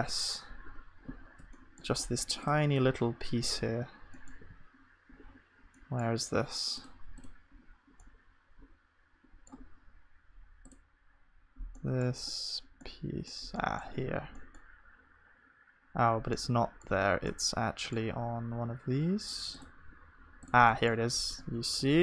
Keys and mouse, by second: 1.2-22.0 middle drag.